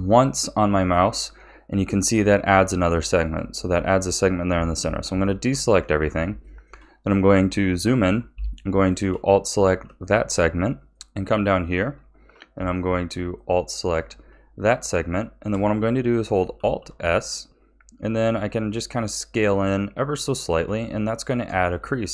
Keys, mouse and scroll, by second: 3.8-4.8 shift+middle drag, 4.8 a, 5.2-5.7 shift+middle drag, 5.7-6.4 scroll up 6, 6.4-8.7 shift+middle drag, 8.7 alt+shift+click, 9.3-10.0 scroll down 4, 10.0 shift+middle click, 10.9 scroll up 2, 13.3 alt+shift+click, 14.0-14.8 scroll down 3, 14.8-16.5 shift+middle drag, 16.5 alt+s, 20.8 shift+middle click, 21.6 a.